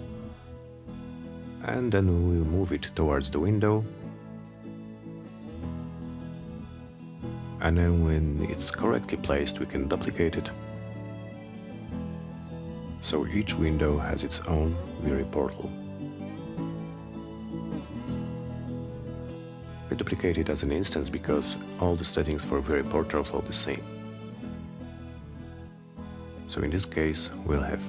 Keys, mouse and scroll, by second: 0.2 middle click, 0.5 F3, 1.4-4.5 drag, 4.8-10.4 alt+middle drag, 10.6 middle click, 10.9 alt+middle click, 13.0-15.9 shift+drag, 17.0 click, 17.8 click, 18.4 middle click, 18.8 scroll down 2, 19.2 middle drag, 20.2-24.4 shift+drag, 25.7 click, 26.1 middle click, 27.4-27.8 shift+drag.